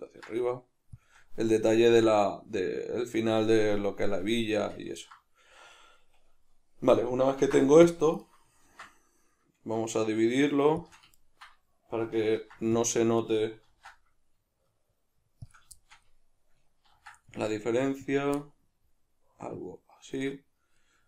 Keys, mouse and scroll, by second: 1.1 shift+click, 2.5-8.3 middle drag, 7.4 ctrl+r, 8.3 right click, 8.7 ctrl+b, 10.9 shift+click, 11.2-13.3 ctrl+middle drag, 12.4 ctrl+r, 13.3 right click, 13.7 ctrl+b, 15.5 shift+click, 15.8-18.1 shift+middle drag, 16.9 ctrl+r, 18.1 click, 18.4-21.0 middle drag.